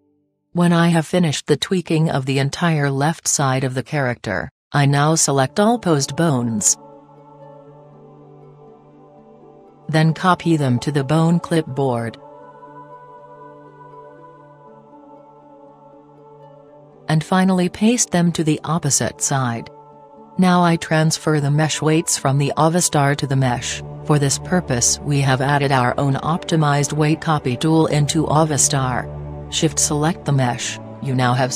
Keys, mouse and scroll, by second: 1.2-4.0 right drag, 5.6-11.2 right drag, 16.4-17.9 drag, 20.7-22.2 drag, 23.8-25.5 middle drag, 26.3-28.0 drag, 30.8-31.5 right drag.